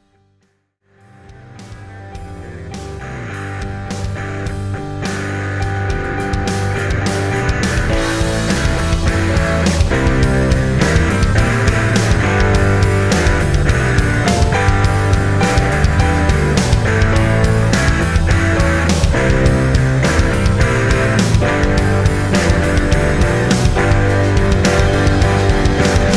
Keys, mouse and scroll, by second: 4.0 click.